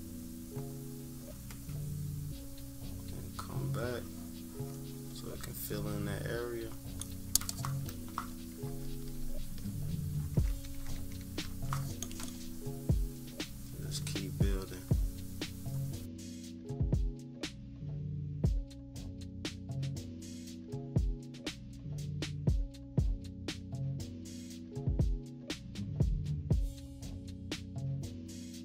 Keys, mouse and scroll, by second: 8.6 -, 8.9 -, 10.1 scroll up 2, 10.4-12.3 scroll down 6, 10.4 =, 10.9 =, 12.3-18.0 drag, 18.0 -, 18.1 scroll down 2, 18.2 =, 18.2 scroll up 2, 18.6-20.0 drag, 20.2 -, 20.4 =, 20.6 scroll down 1, 20.8 -, 21.1 click, 21.4-23.9 drag, 24.2 -, 24.3 scroll up 2, 24.4 scroll down 2, 24.4 =, 24.5 scroll up 2, 24.8-27.4 drag, 27.6 -, 28.0 scroll down 2, 28.0 =, 28.2-28.6 drag.